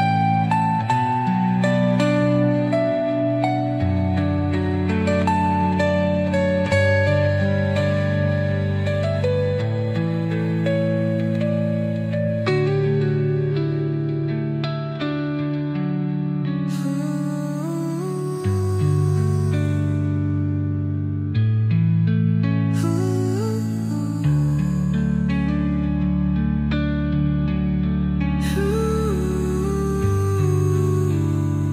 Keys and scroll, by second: 3.7 shift+Page_Down, 6.6 ctrl+z, 9.4 ctrl+z, 21.0 space, 23.7 space.